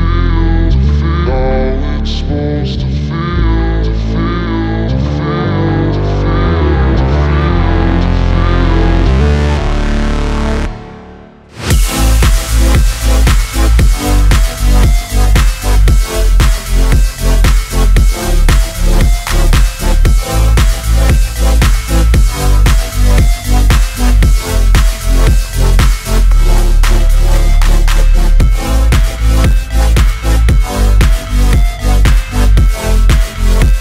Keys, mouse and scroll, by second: 2.3 Return, 2.9 click, 3.6 space, 4.7-6.0 drag, 6.0-7.3 drag, 7.3 F9, 8.0 click, 8.1 space, 9.3-14.9 drag, 15.6 space, 17.2-21.6 drag, 21.6-24.8 drag, 24.8-27.5 drag, 27.5-28.8 shift+drag, 29.8 Return, 30.4 click, 31.1 F9, 31.7-33.3 drag.